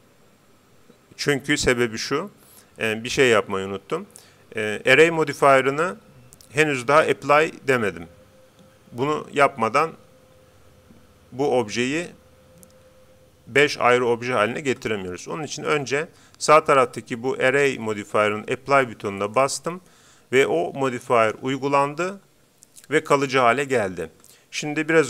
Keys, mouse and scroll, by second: 19.2-20.9 drag.